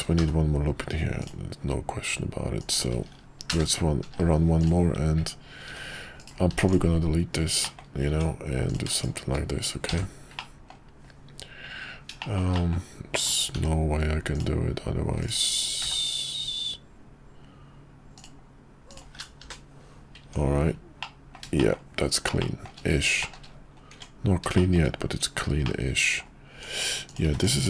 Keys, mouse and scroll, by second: 0.2 k, 5.7 c, 6.5 x, 7.6 middle click, 7.8 scroll down 1, 8.1 Tab, 8.9 shift+click, 10.0 j, 10.3 middle click, 12.2 shift+middle click, 12.6 middle click, 13.5 k, 15.8 k, 20.2 Tab, 21.0-21.3 middle drag, 21.6 shift+middle drag, 22.4 shift+middle drag, 23.2 shift+middle drag, 23.9 Tab, 24.5 shift+middle click, 25.6 middle click, 27.2 x.